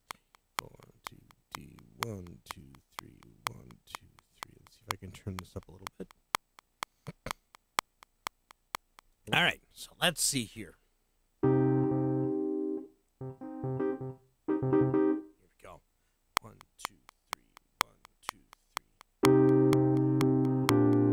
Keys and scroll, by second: 9.1 space, 16.3 *.